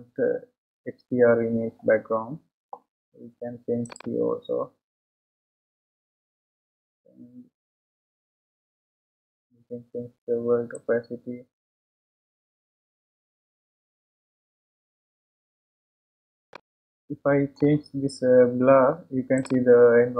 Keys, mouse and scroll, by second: 0.8-1.2 scroll up 1, 1.2-1.6 scroll down 1, 2.7-3.2 scroll down 1, 3.2-4.8 scroll down 1, 4.8-7.0 drag, 15.9-16.6 scroll down 3, 16.6-20.1 middle drag.